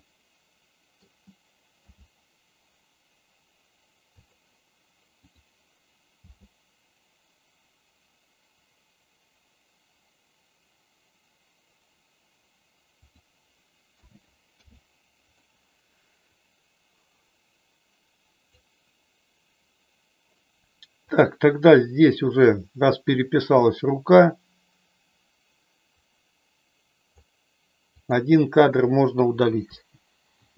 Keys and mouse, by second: 1.8 g, 4.2 click, 5.3 click, 6.3 g, 13.9 a, 14.6 i, 16.3-18.4 drag, 21.0 click, 22.6-27.2 drag, 27.9 click, 29.7 Delete.